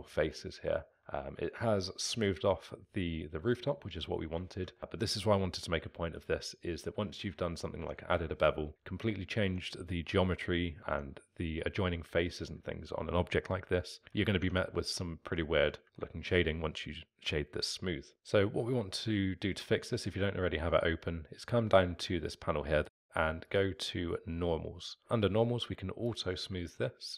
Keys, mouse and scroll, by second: 7.5 scroll down 1, 7.8 Tab, 8.6 alt+middle drag, 8.7-9.4 scroll down 1, 9.4 Tab, 10.8 alt+middle click, 10.9 Tab, 12.2-14.4 alt+middle drag, 14.4 Tab, 15.1-18.1 alt+middle drag, 18.1-19.8 drag, 23.5-24.3 drag, 26.0 click, 26.7-27.1 alt+middle drag.